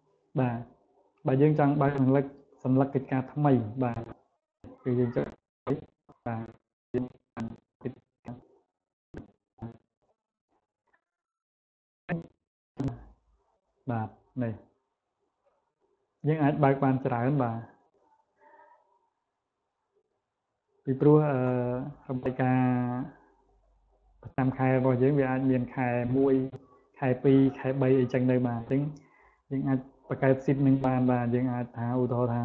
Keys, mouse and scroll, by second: 4.7 click, 12.4 click, 15.8 click, 16.4 click, 17.2 click, 17.7 click, 18.3 click, 19.0 click, 19.5 click, 20.0 click, 20.8 click, 21.8 click, 22.7 click, 23.3 click, 24.4 click, 25.0 click, 26.8 click, 27.4 click, 29.1 click, 29.7 click, 30.5 click, 30.9 click, 31.6 click.